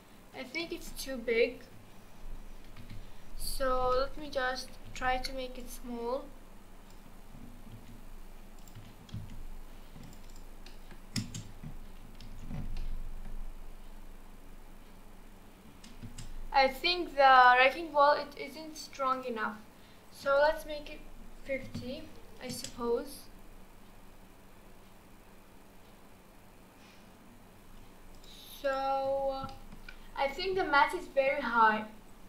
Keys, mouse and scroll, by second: 1.0 scroll down 1, 1.5 KP_1, 2.7 KP_4, 2.8 KP_1, 3.9-4.5 shift+middle drag, 4.5-5.0 scroll up 2, 5.0 alt+z, 5.6 click, 7.8 s, 8.8 g, 10.3 click, 10.7-11.2 middle drag, 11.2 space, 11.5-12.3 scroll down 2, 12.3 alt+z, 12.8-16.0 middle drag, 16.0 space, 16.7 click, 19.1 click, 20.4-22.5 drag, 22.5 space, 27.6 space, 28.1 click, 29.1-29.5 scroll up 1, 29.5 middle click, 30.0-30.8 scroll up 1, 30.8-32.2 shift+middle drag.